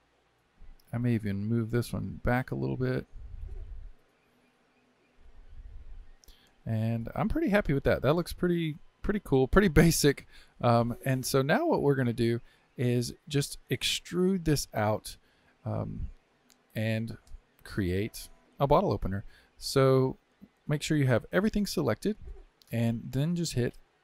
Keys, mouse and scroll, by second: 0.9 click, 1.6 g, 5.3-9.3 shift+middle drag, 9.3-9.7 scroll down 2, 9.7-14.5 shift+middle drag, 18.8-21.2 middle drag, 21.2 a, 22.0-24.0 middle drag.